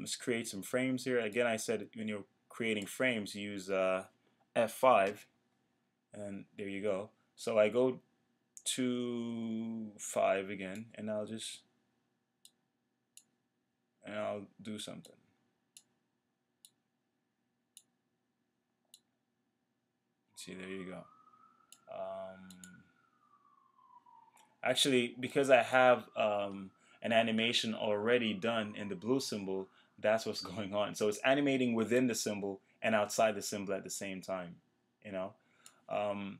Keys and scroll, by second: 5.1 F5.